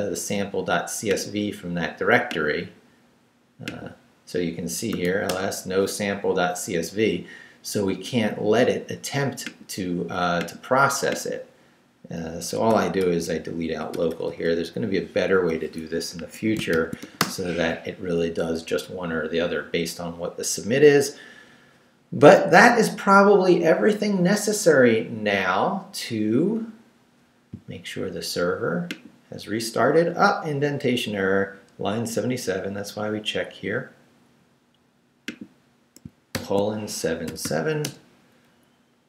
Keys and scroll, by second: 4.7-5.5 typing, 12.7 i, 13.0 BackSpace, 16.2 Escape, 16.7 shift+;, 17.0 shift+w, 17.2 Return, 36.3 shift+;, 37.3 shift+7, 37.8 Return.